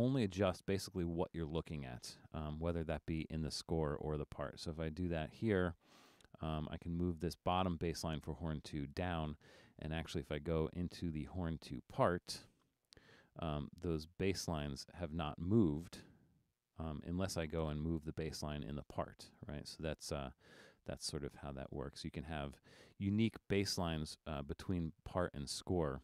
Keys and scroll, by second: 20.8 super+z.